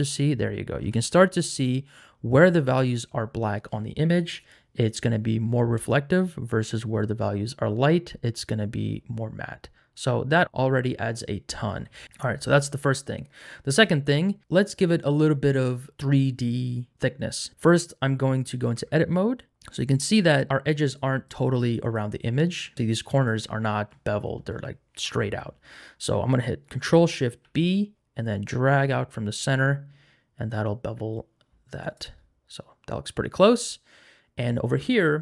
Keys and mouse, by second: 5.4 middle click, 12.4 middle click, 13.3 middle click, 13.7 click, 18.8 Tab, 27.4 ctrl+shift+b.